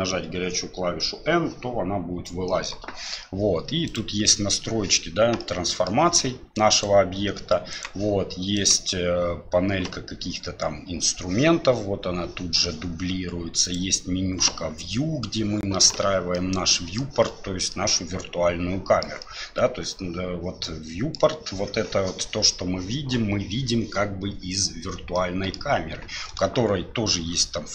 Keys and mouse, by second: 5.4 middle click, 6.7 click, 7.7 click, 8.6 click, 16.3 middle click, 17.7-19.0 middle drag, 19.2-21.1 middle drag, 25.1 middle click.